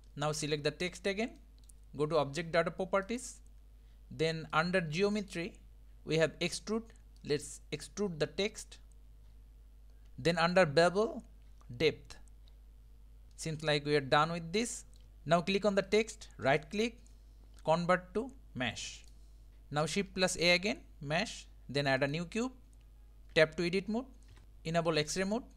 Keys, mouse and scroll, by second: 0.1-0.9 middle drag, 0.9 click, 1.4-3.1 middle drag, 3.1 click, 4.5-10.0 drag, 10.4-13.3 drag, 13.3-15.0 middle drag, 15.9 click, 16.4-19.5 right drag, 19.5 shift+a, 20.1 shift+a, 23.4 Tab, 24.3 KP_1, 25.1-25.5 drag.